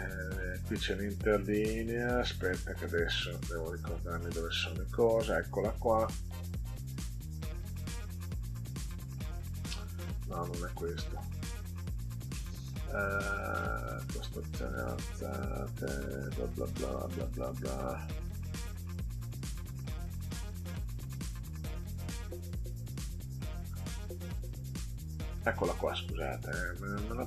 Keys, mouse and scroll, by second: 2.8 click, 4.1 click, 7.5 click, 8.9 click, 10.9 click, 13.5 click, 14.2-14.9 scroll down 4, 23.2 click, 24.7 click, 25.3 click, 26.5-27.2 drag.